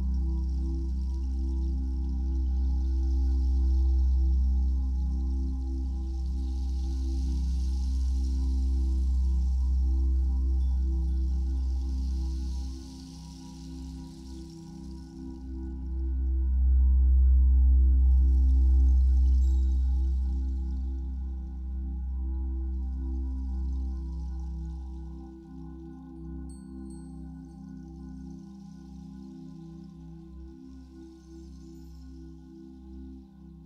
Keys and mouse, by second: 3.3-4.4 drag, 4.8-6.2 alt+drag, 7.1-10.2 drag, 10.7 alt+click, 13.1 ctrl+s, 13.5 alt+shift+click, 14.7-15.9 drag, 16.2-17.0 alt+drag, 19.2-20.5 alt+drag, 20.5 ctrl+s, 20.8 ctrl+s, 22.8-29.2 drag, 31.6-33.3 ctrl+drag, 33.3 ctrl+c.